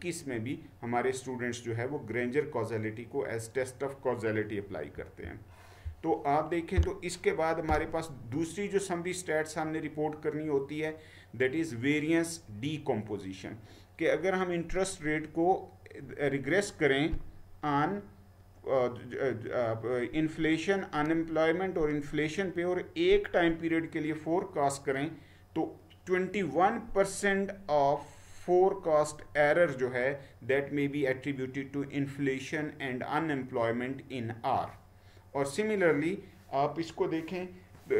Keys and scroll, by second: 5.0 Right, 7.7 Right.